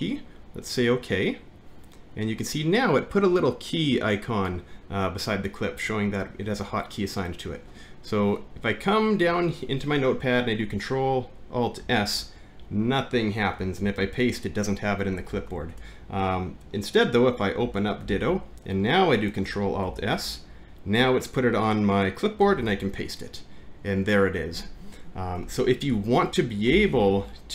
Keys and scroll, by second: 11.8 ctrl+alt+s, 13.8 ctrl+v, 15.4 Home, 15.8 BackSpace, 18.0 alt+`, 19.9 ctrl+alt+s, 22.7 ctrl+v, 25.9 shift+Home, 26.7 Up.